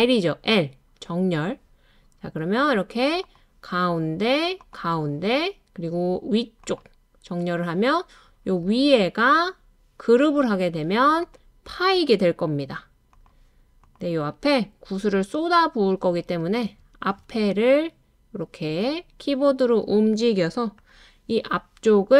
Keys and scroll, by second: 16.0 Left, 16.3 Left, 16.6 typing, 16.6 Left, 17.2 Left, 17.7 typing, 20.9 typing.